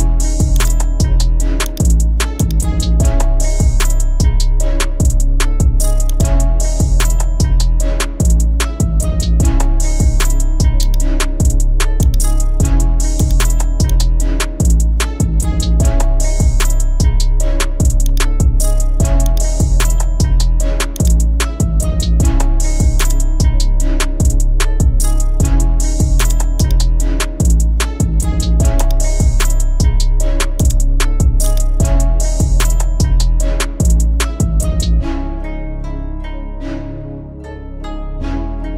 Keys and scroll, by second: 24.7 ctrl+alt+shift+e, 27.5 Return.